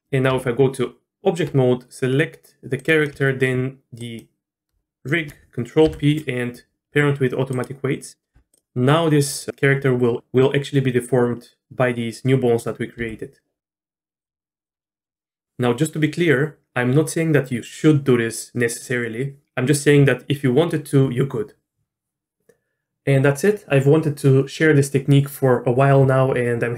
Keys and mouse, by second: 0.3 Tab, 2.8 click, 4.1 shift+click, 5.8 ctrl+p, 8.3 Tab, 8.5 click, 13.0 r, 14.6 r, 14.8 middle click.